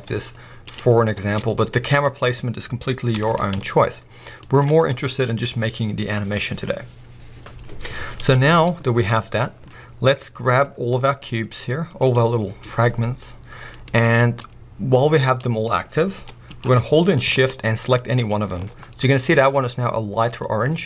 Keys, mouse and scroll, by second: 0.1 s, 0.7 click, 1.1 s, 2.0 click, 3.1 r, 4.6 shift+click, 4.8-8.9 scroll up 1, 9.4-9.7 scroll down 2, 9.7-11.2 middle drag, 11.2 click, 12.3-13.0 scroll up 1, 13.0-16.6 middle drag, 15.8-16.2 scroll down 1, 16.2 g, 16.6 right click, 16.7-18.1 middle drag, 17.0-18.1 scroll up 1, 18.1 shift+click, 18.8-19.2 middle drag, 19.2-19.8 scroll up 3, 19.3 middle drag, 19.8-20.7 scroll down 2, 20.7-20.8 middle drag.